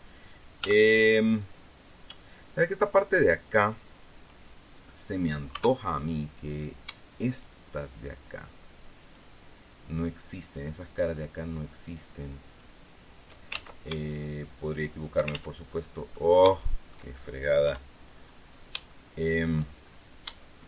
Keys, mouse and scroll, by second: 1.2 z, 2.2-3.5 scroll up 2, 3.5-4.1 scroll up 1, 4.1-4.7 scroll up 1, 4.7-6.0 scroll up 1, 6.1 Tab, 6.9 middle click, 7.8 shift+right click, 9.6 shift+middle click, 12.4 shift+right click, 13.0 shift+right click, 14.1 ctrl+shift+z, 15.2 shift+middle click, 15.9 ctrl+shift+z, 16.2 click, 17.1 shift+click, 17.5-18.2 scroll up 1, 18.2 3, 18.8-19.4 scroll up 1, 19.4 shift+middle click.